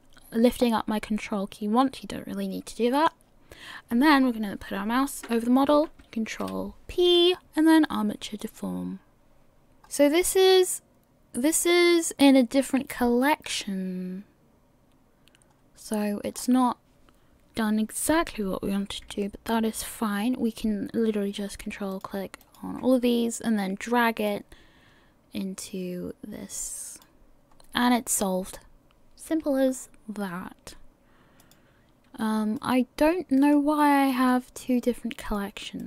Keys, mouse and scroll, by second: 1.3 scroll up 2, 1.8 middle click, 9.8 scroll up 5, 15.3 scroll down 5, 16.4 scroll up 4, 21.9 ctrl+click, 23.3-24.3 scroll down 1, 24.3 click, 27.6-28.4 scroll down 1, 28.4-30.6 scroll up 2, 31.4 click, 32.6 click.